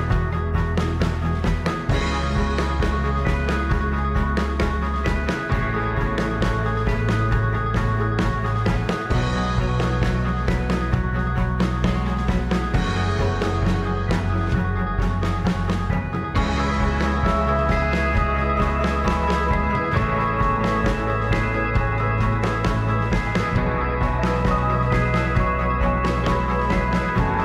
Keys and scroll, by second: 3.9 shift+b, 12.9 g, 15.0 g, 16.1 ctrl+a, 19.6 ctrl+a, 21.8 g, 22.2 ctrl+a, 22.9 ctrl+a, 23.5 a, 25.6 x.